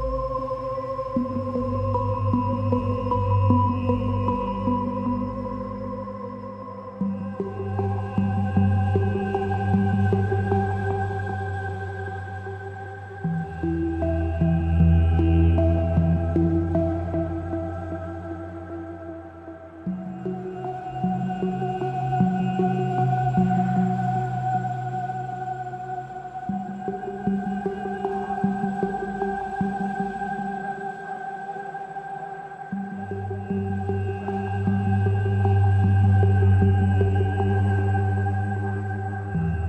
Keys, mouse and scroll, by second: 8.7-9.2 scroll up 11, 9.4 ctrl+s, 9.5 shift+middle click.